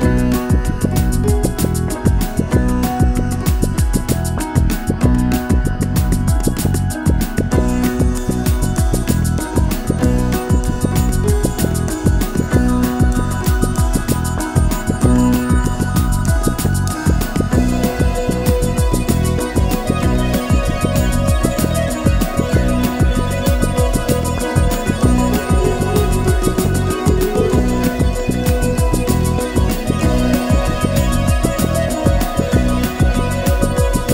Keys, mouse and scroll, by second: 0.0-2.7 typing, 0.9 click, 1.5 click, 1.6 click, 2.2 click, 2.7 click, 2.9-3.4 scroll up 1, 3.4-3.7 middle drag, 3.7 g, 3.9 g, 5.0 shift+click, 5.2 click, 5.3 middle click, 5.7-9.2 typing, 5.9 middle drag, 6.4 click, 6.6 middle click, 7.2 click, 7.4 middle click, 8.0 shift+click, 8.0 middle drag, 8.3 click, 8.7-9.2 scroll down 4, 9.4-9.9 scroll up 2, 9.5 shift+middle click, 9.9 click, 10.0 shift+middle drag, 10.2 scroll down 2, 10.3 scroll up 1, 11.1-20.3 typing, 11.2 scroll down 8, 11.7 scroll up 4, 12.2 scroll up 3, 12.3 shift+middle click, 14.0 alt+m, 14.9 middle click, 15.2 click, 15.6 click, 15.7 middle click, 15.9 shift+click, 16.9 scroll down 3, 17.9 shift+middle click, 18.0 scroll up 4, 18.1 click, 18.5 click, 18.5 shift+click, 19.4 middle click, 19.8 middle drag, 20.0 Tab, 20.6 shift+middle click, 20.7-21.5 scroll up 2, 21.5 shift+d, 21.6 r, 22.0 g, 22.4-22.9 shift+middle drag, 22.9 click, 23.2 shift+middle drag, 23.5 Tab, 23.5-24.0 scroll down 1, 25.2 middle click, 25.3 Tab, 25.8-34.1 typing, 25.9 scroll down 4, 26.0 middle click, 26.7 middle click, 26.8 scroll up 3, 27.7 click, 28.1 scroll down 2.